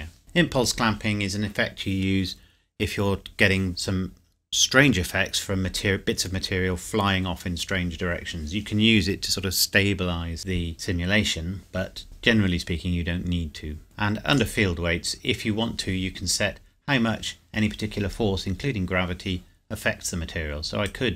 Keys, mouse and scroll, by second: 0.2-1.6 scroll down 1, 13.8 click, 14.7-15.3 scroll down 1, 20.8 click.